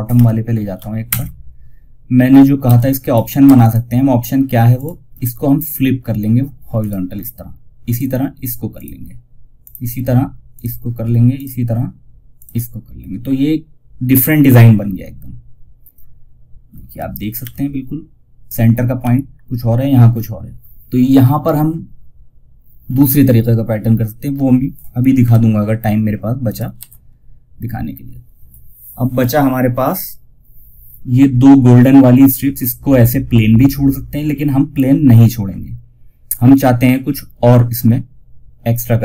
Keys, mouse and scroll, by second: 1.9 F2, 2.0 click, 12.4 scroll down 1, 16.7 Page_Up, 24.5 Page_Up, 25.7 click, 26.0 shift+F2, 38.1-39.0 drag.